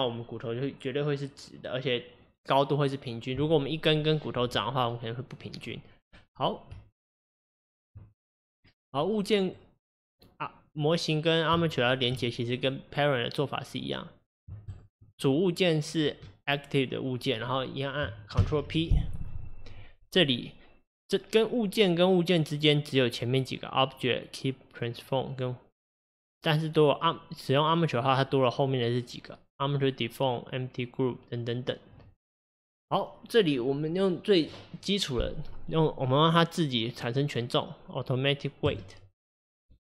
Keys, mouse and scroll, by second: 6.8 Tab, 8.4 click, 8.9-12.6 middle drag, 12.6 click, 14.7 shift+click, 18.4 ctrl+p.